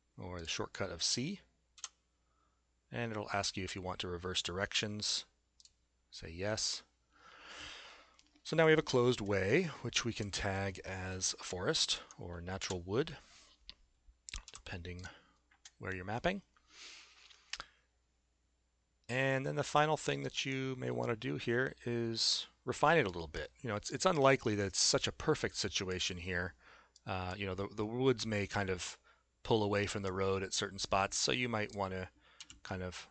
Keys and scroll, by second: 1.8 c, 12.1 Tab, 12.6 Return, 14.5 s, 32.4 w.